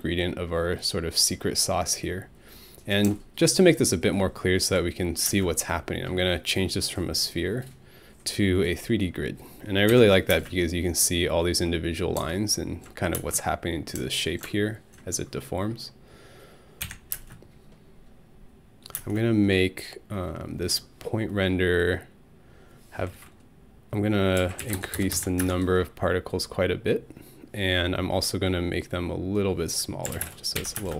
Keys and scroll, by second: 5.3 alt+space, 9.9 Home, 10.3 space, 13.2 alt+space, 16.8 Home, 17.1 space, 19.0 space, 24.1-25.6 typing, 30.1 5, 30.2 Return, 30.6 Home, 30.8 space.